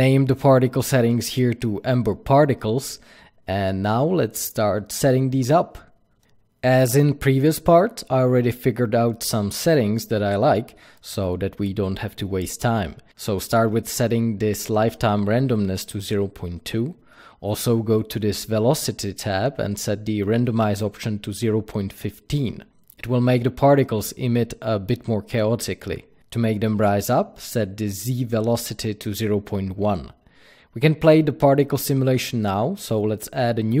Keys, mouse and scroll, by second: 1.1-10.6 drag, 4.4 Return, 10.6-13.6 middle drag, 13.6-19.4 drag, 14.2 KP_Enter, 16.1-17.5 scroll down 2, 17.5-18.2 scroll down 1, 18.2-18.9 scroll down 1, 20.4-33.8 drag, 21.4 KP_Enter, 27.0 KP_Enter.